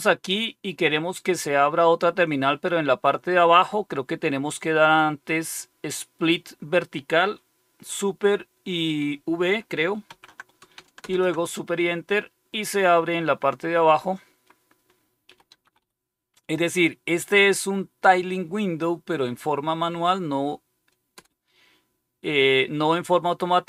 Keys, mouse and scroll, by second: 10.0 super+v, 11.0 super+Left, 15.2-16.2 typing, 21.1 Return.